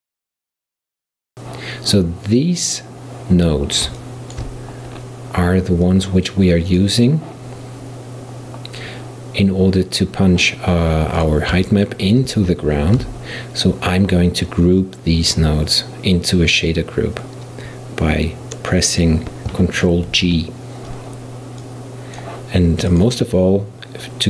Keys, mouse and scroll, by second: 4.0-5.0 shift+middle drag, 5.0-5.9 scroll down 1, 5.9 click, 11.2-13.0 drag, 13.0 b, 20.2 ctrl+g, 21.7-23.0 drag.